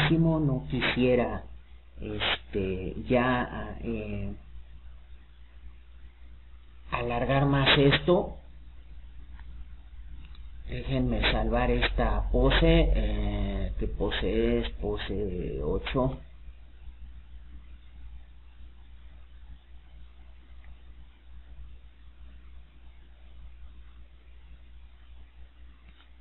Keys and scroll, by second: 14.2-15.5 typing, 16.8 8, 17.5 Return.